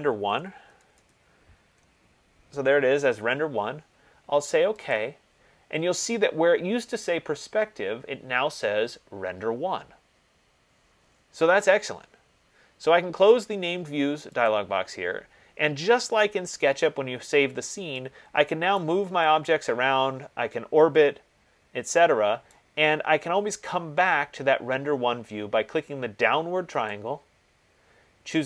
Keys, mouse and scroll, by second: 0.4-2.0 typing, 5.2 click, 7.0 click, 14.8 click, 19.2 right click, 22.6 right click, 27.1 click.